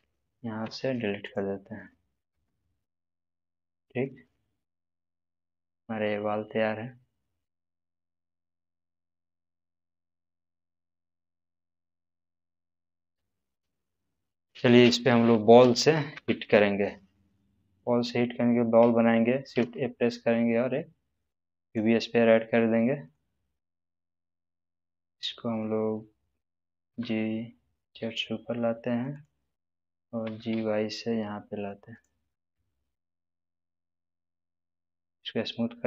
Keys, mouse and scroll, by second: 0.6 x, 1.2 click, 2.3 space, 5.8-7.7 middle drag, 12.3-14.1 middle drag, 14.7-16.1 scroll down 1, 16.1 space, 19.5 shift+a, 21.7 click, 22.7-23.3 middle drag, 24.6 click, 26.9 g, 27.8 z, 29.1 click, 30.2 g, 30.5 y, 31.9 click, 31.9 click, 32.9-35.4 middle drag.